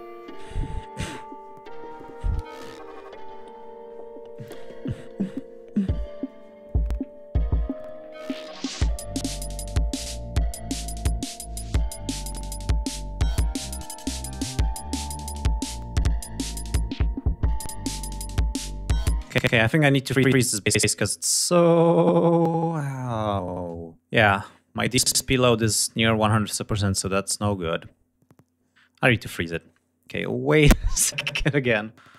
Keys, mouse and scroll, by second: 8.5-9.7 scroll up 4, 10.7 scroll down 2, 11.0-11.4 ctrl+scroll up 2, 13.0 ctrl+scroll up 2, 14.9 ctrl+scroll down 2, 16.2 ctrl+scroll up 2, 16.9 ctrl+scroll up 2, 18.2 space, 18.6 ctrl+scroll down 2, 19.6-20.0 ctrl+scroll down 2, 20.3 ctrl+scroll down 3, 21.7 scroll down 2, 22.3 ctrl+scroll up 2, 27.4 scroll up 2, 29.0-29.3 scroll down 2.